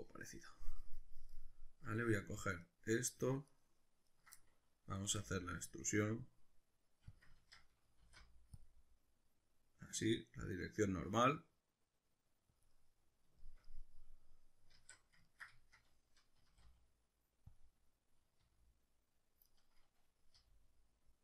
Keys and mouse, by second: 0.8 middle click, 2.3 ctrl+right click, 2.6 ctrl+right click, 3.2 ctrl+right click, 4.1 ctrl+right click, 4.4-7.2 middle drag, 5.1 e, 7.2 click, 7.4 ctrl+z, 8.1 alt+e, 12.7 click, 12.7-17.6 middle drag, 14.7 alt+q, 16.4 s, 17.6 click, 18.4 r, 19.6 right click, 20.3 g.